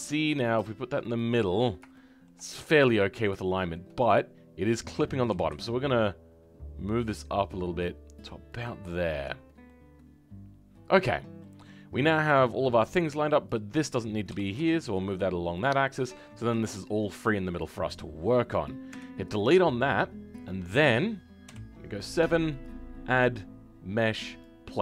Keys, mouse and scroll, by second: 1.9 shift+middle click, 2.4 scroll up 1, 3.4-5.3 middle drag, 5.3 g, 9.6-11.1 middle drag, 11.1 scroll down 1, 11.3-13.4 middle drag, 13.4 click, 15.8-17.5 middle drag, 17.5 click.